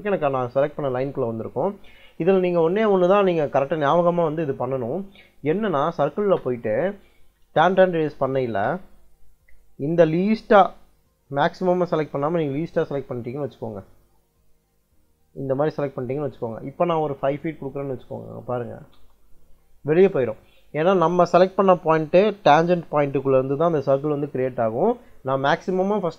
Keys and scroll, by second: 5.8 c, 6.1 space, 8.1 t, 8.4 space, 17.6 5, 18.0 ', 18.8 Return.